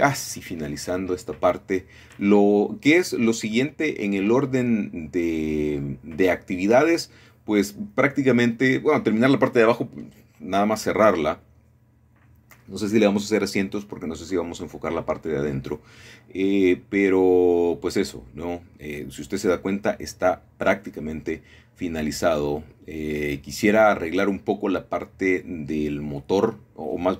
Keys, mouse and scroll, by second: 0.1 Tab, 0.5 scroll down 1, 1.0-1.6 scroll down 1, 2.7 middle click, 3.0-3.8 scroll down 1, 4.5 scroll down 1, 4.8-6.0 shift+middle drag, 5.1-6.0 scroll up 1, 6.1 right click, 6.9-7.9 drag, 7.9-9.2 scroll down 1, 9.2 shift+middle click, 9.7 scroll down 1, 9.8 shift+middle click, 11.5 middle click, 13.3 middle click, 13.8 scroll up 1, 14.4 shift+middle click, 15.2-16.1 scroll down 1, 16.4-17.5 drag, 19.8-20.9 drag, 22.4 shift+middle click, 23.4-24.5 shift+middle drag.